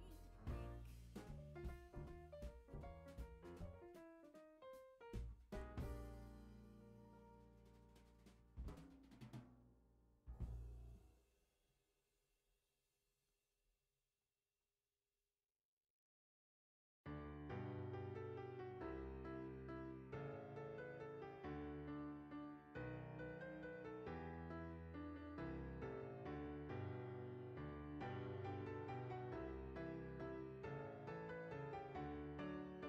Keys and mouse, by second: 2.1 click, 3.6 alt+z, 4.0 click, 4.6 alt+z, 10.7 click, 11.7 g, 12.2 click, 12.4 r, 13.3 click, 13.6 g, 14.7 click, 15.2 Tab, 15.5 click, 17.7 shift+middle click, 19.1 F6, 21.3 click, 22.0 g, 24.4 click, 24.9 Tab, 25.9 a, 28.8 click, 30.4 ctrl+r, 30.9 click, 31.7 right click, 32.2 s.